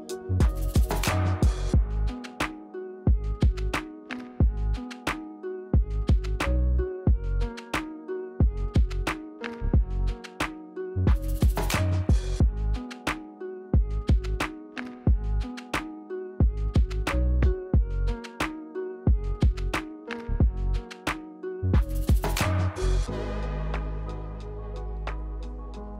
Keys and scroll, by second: 0.6 e, 1.7 e, 2.5 r, 4.0 r, 4.9 e, 5.8 r, 11.3 e, 12.7 r, 13.8 r, 15.0 r, 16.1 w, 25.2 ctrl+1.